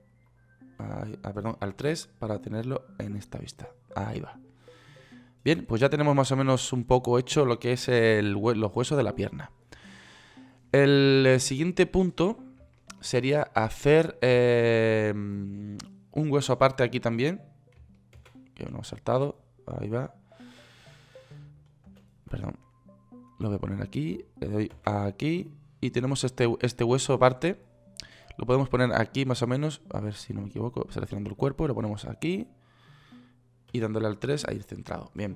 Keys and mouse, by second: 1.2 KP_1, 2.1 KP_3, 18.5 shift+a, 21.7 middle click, 22.2 ctrl+z, 25.1 shift+a, 34.1 KP_3.